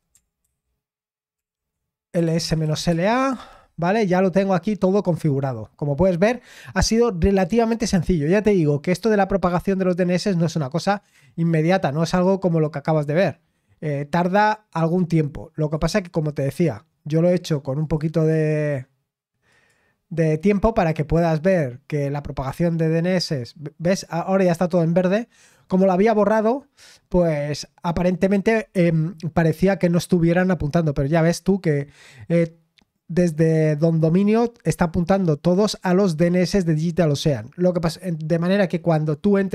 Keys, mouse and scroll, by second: 0.4 ctrl+c, 1.3 ctrl+l, 1.9-3.2 typing, 10.7-13.3 drag, 13.3-13.9 scroll down 2, 13.9-15.6 scroll up 2, 15.6-18.9 drag, 19.5-24.7 drag, 24.7-26.4 scroll down 3, 26.4-27.1 scroll up 1, 27.1-30.9 scroll up 1, 30.9-32.5 scroll down 2, 32.5-35.1 scroll up 3, 35.1-35.6 scroll down 2, 35.6-38.2 scroll up 2.